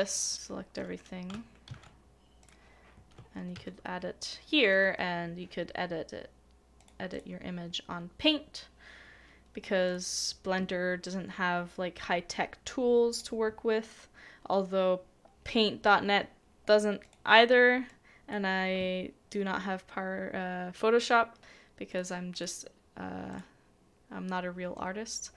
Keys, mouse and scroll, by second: 1.3 middle click, 1.7 ctrl+c, 4.2 ctrl+v, 7.1 double click.